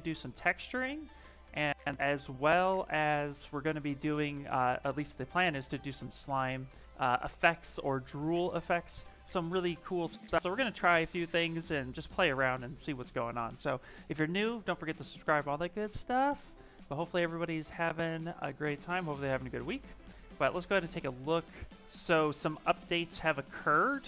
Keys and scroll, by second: 22.0 ctrl+n.